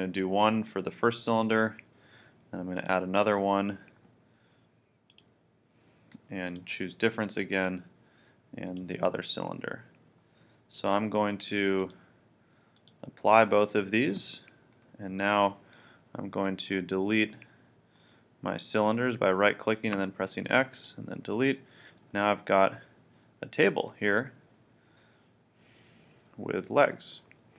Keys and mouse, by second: 1.4-16.4 drag, 16.4 x, 20.0 x, 22.1-23.5 middle drag.